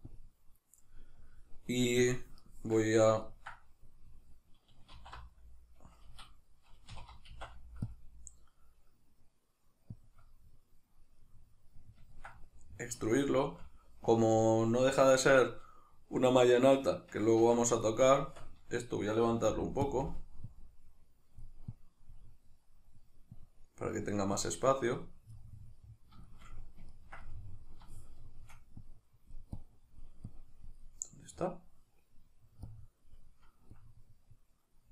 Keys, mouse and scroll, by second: 3.2-10.1 ctrl+middle drag, 5.0 alt+e, 6.2 Escape, 6.9 3, 7.3 alt+e, 10.1 click, 10.2-17.8 middle drag, 17.4 Tab, 17.8 right click, 18.2 Tab, 19.5 f, 19.9 click, 22.4-23.4 middle drag, 23.4-25.4 drag, 25.4-28.8 middle drag, 28.8-30.9 drag, 30.9-32.7 middle drag, 32.7-34.9 drag.